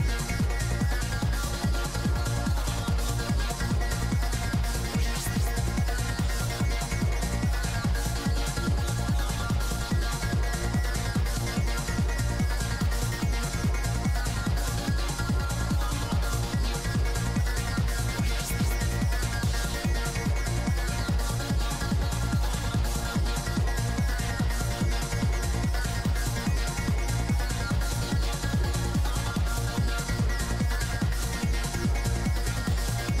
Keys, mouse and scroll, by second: 1.2 i, 1.5-2.8 drag, 2.3 middle click, 2.7-4.5 typing, 4.8 click, 6.7-8.9 drag, 8.4 right click, 8.5 middle click, 8.9 middle click, 9.0-10.5 drag, 10.0 middle click, 10.5 middle click, 11.2 click, 11.2 right click, 11.8 middle click, 12.2 p, 12.3 f, 12.7 click, 13.8 shift+c, 13.9 f, 14.2 middle click, 15.0 f, 15.5 click, 16.3 click, 16.9 middle click, 17.6 i, 17.7 f, 18.0-20.5 drag, 20.6-22.8 middle drag, 22.1 p, 22.4 f, 22.8-24.2 drag, 24.2-25.4 middle drag, 25.4 shift+c, 25.5 f, 25.9 middle click, 26.3 click, 26.3 right click, 27.4 click, 28.1 middle click, 28.5-30.1 drag, 28.5 right click, 30.1 middle click, 30.1 f, 30.8-33.2 drag.